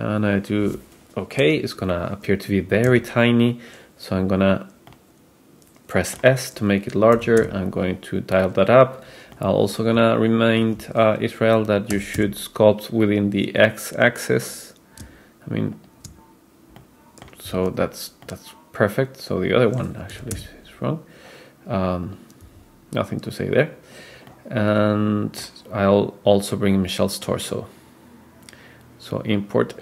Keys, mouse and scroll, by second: 2.9 s, 4.9-6.3 middle drag, 7.2 g, 9.4-10.8 middle drag, 11.9 r, 16.8-17.3 middle drag, 17.6 super+z, 18.3-19.9 middle drag, 20.2 r, 22.4 s, 24.3-25.6 middle drag, 26.8-29.8 drag.